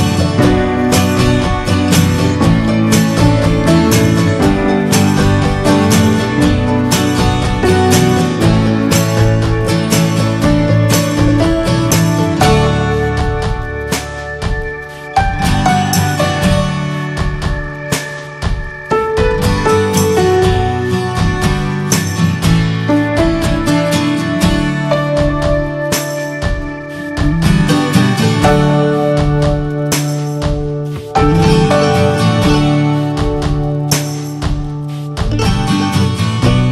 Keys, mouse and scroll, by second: 0.1 shift+middle click, 1.0-1.8 scroll up 2, 1.3 middle click, 1.8-3.2 shift+middle drag, 3.2 scroll down 1, 3.4-4.8 shift+middle drag, 4.8-6.2 scroll up 7, 4.9 middle click, 5.4 middle click, 6.3 shift+middle click, 7.0-8.3 drag, 8.3-8.7 scroll down 6, 8.7 middle click, 9.4 middle click, 9.5-9.9 scroll up 2, 9.7 ctrl+z, 10.0-11.8 shift+middle drag, 11.8 right click, 12.2 scroll up 1, 12.5 alt+middle click, 12.8 scroll up 2, 13.8-18.2 drag, 18.6-22.9 drag, 22.9 scroll down 4, 23.1 middle click, 23.5 shift+middle click, 23.8 scroll up 3, 24.0 shift+middle click, 24.6 scroll up 1, 25.3-27.3 drag, 27.4 scroll down 3, 27.5 shift+middle click, 28.1 scroll down 1, 28.4 middle click, 28.5-29.3 scroll up 4, 28.8 shift+middle click, 29.1 middle click, 29.4-31.3 shift+middle drag, 31.3 click, 31.6-32.5 scroll up 1, 32.5-34.2 shift+middle drag, 34.2-35.5 drag.